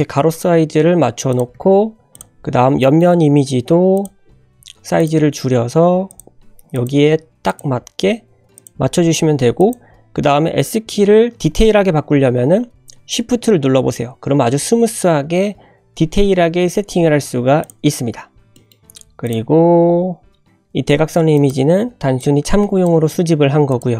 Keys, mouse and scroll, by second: 0.3 scroll down 2, 1.3 click, 1.5 g, 2.3-2.6 scroll up 2, 2.8 shift+middle click, 3.1-3.4 scroll up 1, 3.4 g, 4.1 scroll up 2, 4.6 s, 5.1 g, 6.3 s, 6.9 g, 7.8 s, 17.9 scroll down 2, 18.5 shift+middle click, 19.2 drag, 19.5-19.8 scroll down 2, 20.5 click, 20.7 scroll up 2, 21.2 g, 21.9 scroll up 2, 22.3 shift+middle click, 22.6 click, 23.2 click, 23.4 g.